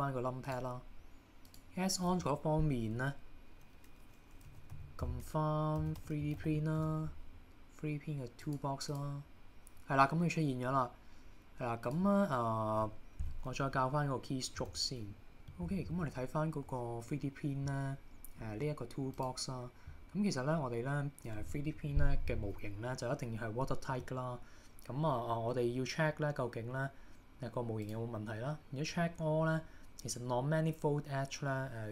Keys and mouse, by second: 15.4 click, 27.9 click.